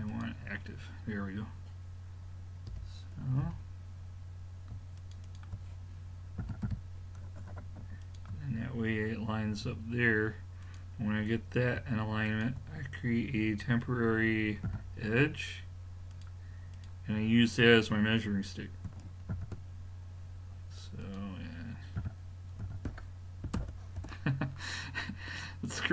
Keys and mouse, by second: 2.7 l, 3.4 l, 5.0-7.1 drag, 6.4 g, 9.7 a, 10.7-14.0 drag, 14.1 click, 14.7 f, 16.1-18.6 drag, 19.4 shift+d, 22.0 r, 25.7-25.9 drag.